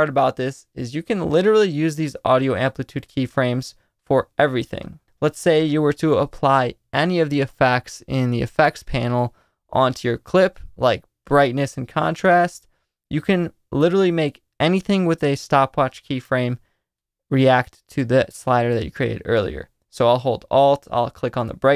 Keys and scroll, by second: 2.4 super+z.